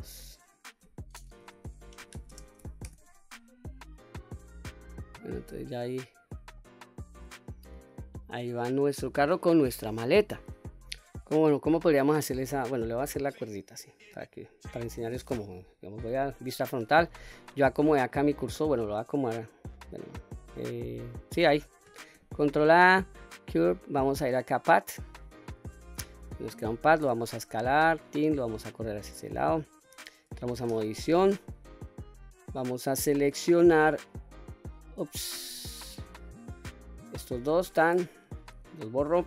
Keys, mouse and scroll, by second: 0.1-3.5 drag, 4.2-4.7 scroll up 2, 4.7-6.3 middle drag, 6.9-7.2 middle drag, 7.5 click, 8.0-8.3 scroll down 1, 8.3-9.1 middle drag, 9.9 middle click, 10.8 Delete, 10.8 middle click, 11.0-11.7 scroll up 2, 11.9-12.3 shift+middle drag, 12.5-13.0 scroll up 2, 13.0-13.5 scroll down 2, 13.5-13.8 middle drag, 14.1 scroll up 1, 14.5 middle click, 16.0 KP_1, 18.0 shift+right click, 19.0 shift+click, 20.8 shift+click, 22.2 shift+a, 26.3-27.1 scroll down 1, 27.1 s, 28.1 click, 29.2-29.9 drag, 30.7 Tab, 32.0 click, 34.1-34.8 drag, 35.4 ctrl+z, 36.0 click, 36.6 click, 38.4 Delete.